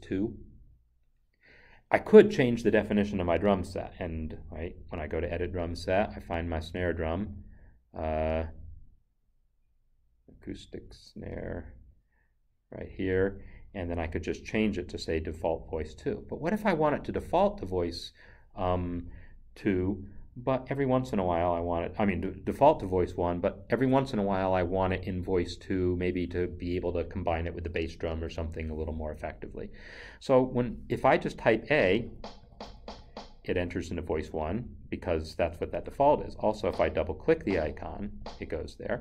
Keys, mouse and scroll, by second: 4.3 click, 12.9 click, 17.2 click, 31.6 a, 36.7 double click, 37.3 click, 37.5 double click, 38.1 click.